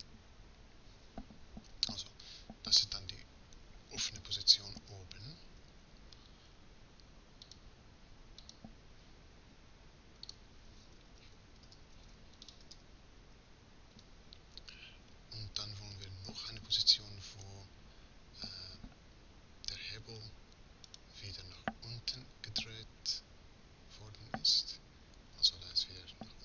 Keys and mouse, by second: 4.9 a, 5.3 a, 7.5-8.7 drag, 10.7 click, 11.1 f, 21.7 right click, 24.1 r.